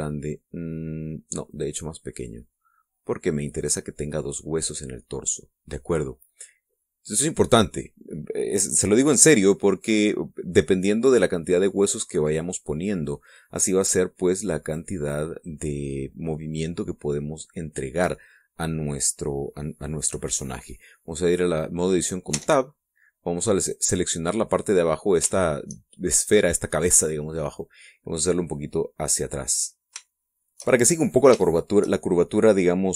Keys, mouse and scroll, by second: 2.1 click, 2.9-4.6 drag, 4.7-5.9 middle drag, 11.3-13.8 middle drag, 15.4 click, 23.0 Tab, 24.2 right click, 25.6 middle click, 26.0 shift+middle click, 28.3-30.3 drag, 30.5 shift+middle click, 31.1 shift+middle click, 32.1-32.9 shift+middle drag.